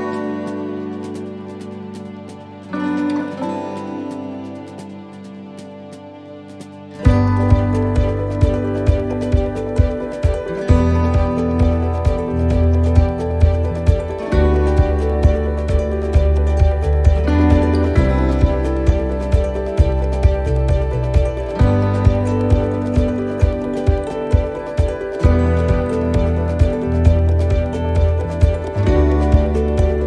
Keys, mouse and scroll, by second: 1.3 click, 4.2 shift+d, 7.2 s, 10.2 middle click, 11.7 s, 15.8 scroll up 1, 16.8 right click, 19.4 click, 21.0 right click, 21.6 alt+shift+right click, 23.5 alt+shift+right click, 24.2 middle click, 25.5 e.